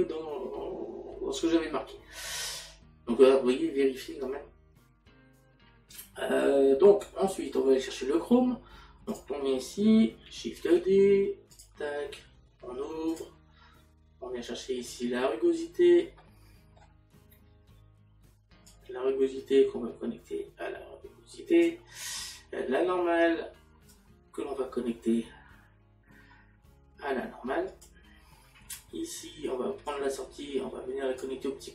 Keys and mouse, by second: 9.5 click, 15.4 middle click, 24.9 click.